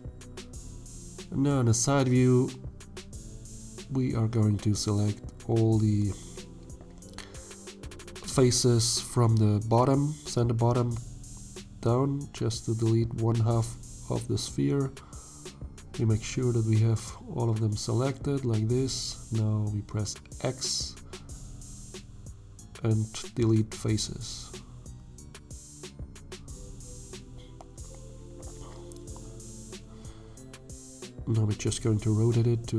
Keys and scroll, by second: 0.2 shift+z, 2.3 3, 5.4 shift+z, 24.0 x, 26.7 a, 28.0 1, 28.9 shift+z, 30.5 r.